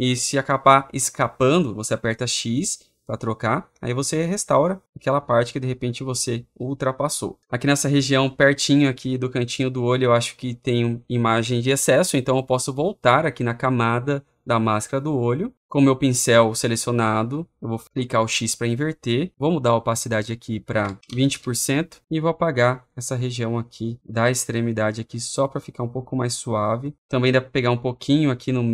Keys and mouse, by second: 2.2 x, 4.9 click, 5.8 click, 14.8 click, 18.1 x, 20.1 middle click, 20.7-21.5 typing, 22.7 middle click, 23.3 middle click, 23.8 middle click, 24.0 middle click, 24.2 middle click, 24.4 middle click, 24.7 middle click, 24.9 middle click, 25.1 middle click, 25.3 middle click, 27.6 click, 28.4 click.